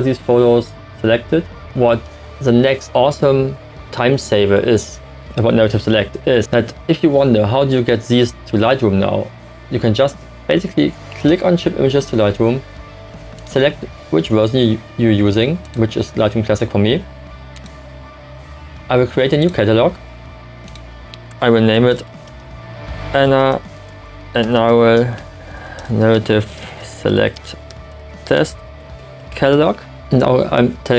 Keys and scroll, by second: 21.9-30.2 typing.